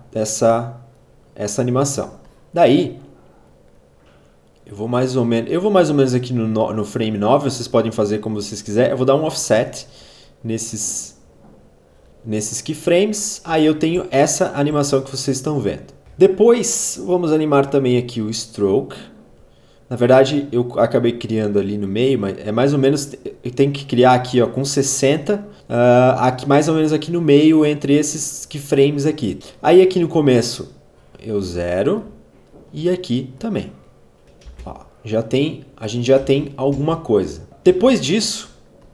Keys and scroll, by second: 11.9 space, 13.5 space, 34.1 space, 36.2 space.